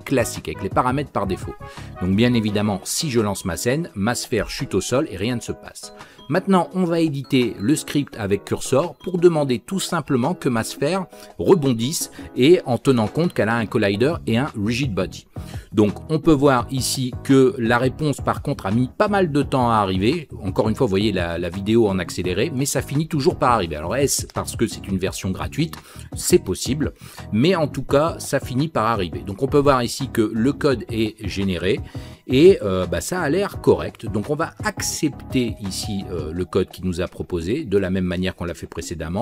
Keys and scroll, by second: 12.1 ctrl+k.